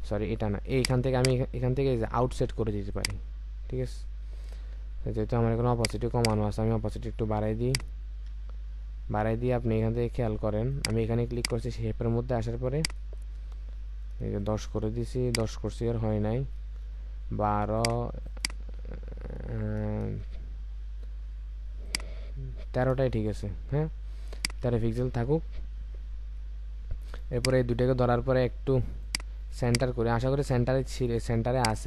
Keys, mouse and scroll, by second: 6.2 double click, 8.4-9.2 alt+scroll up 1, 13.3-14.3 scroll up 1, 14.3 Return, 15.7-16.6 scroll up 1, 16.6 Return, 18.3 double click, 18.8-19.5 scroll up 1, 20.1 Return, 22.3-22.9 scroll down 1, 22.9 Return, 24.6 Return, 24.7-25.1 alt+scroll down 1.